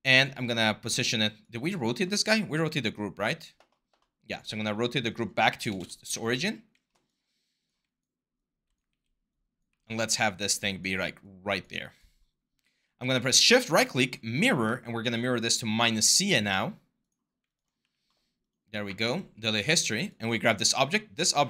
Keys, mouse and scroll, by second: 5.5 0, 5.6 Return, 8.7 r, 9.5 w, 12.7 q, 17.6 q.